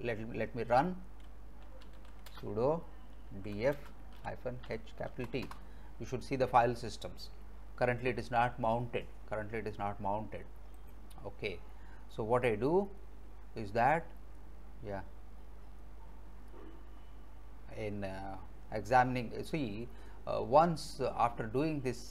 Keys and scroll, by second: 0.7 alt+Tab, 1.5-5.1 typing, 5.5 Return.